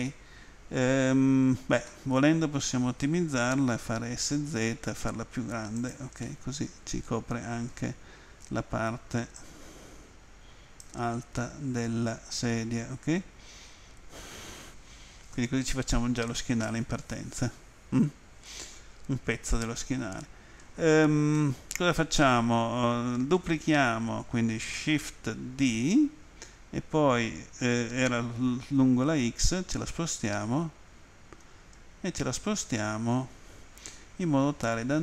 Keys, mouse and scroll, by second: 1.9 middle click, 3.6-4.7 typing, 5.8 click, 6.2 middle click, 9.4 click, 11.4 middle click, 21.4 middle click.